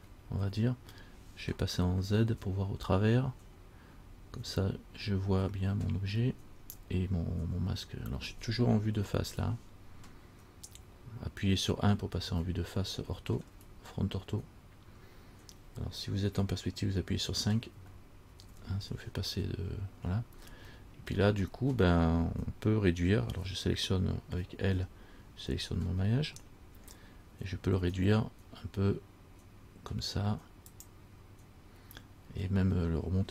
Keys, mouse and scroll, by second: 2.5-2.9 shift+scroll down 1, 2.5 z, 4.8-5.7 scroll up 3, 9.1 KP_1, 12.7 shift+middle click, 13.7-14.6 shift+scroll down 1, 18.0 KP_5, 18.5 KP_5, 20.9-21.3 shift+scroll up 1, 21.3 shift+middle click, 21.3-21.7 shift+scroll down 1, 24.9 l, 28.0 s.